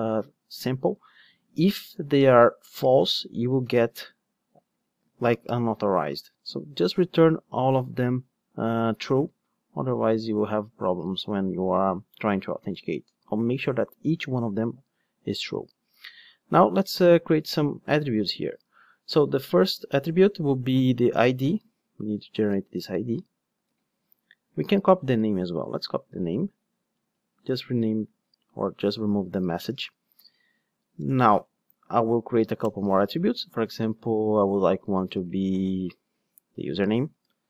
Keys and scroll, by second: 18.6 Tab, 22.5 super+c, 23.6 ctrl+Tab, 23.7 super+v, 24.6 ctrl+Tab, 25.8 super+c, 26.2 ctrl+Tab, 27.5 super+v.